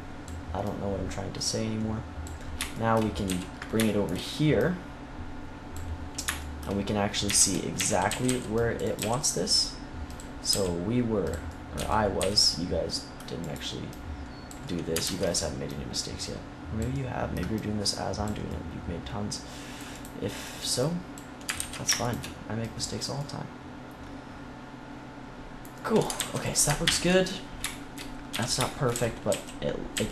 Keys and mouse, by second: 3.2 z, 4.5 click, 7.2-8.9 typing, 8.9 click, 10.4 g, 11.4 click, 12.1 z, 14.8 middle click, 15.0 ctrl+s, 18.8 click, 19.8-21.5 right drag, 21.5 ctrl+z, 23.1-24.5 middle drag, 25.7 middle click, 26.1 ctrl+s, 26.8 ctrl+KP_1, 28.2-30.1 typing.